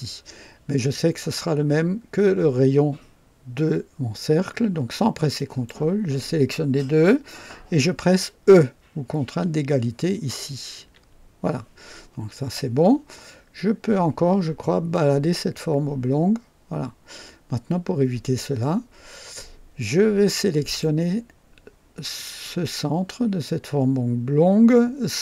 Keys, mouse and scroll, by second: 5.3 click, 10.8 e, 14.9-21.0 drag, 22.1 click, 25.1 click.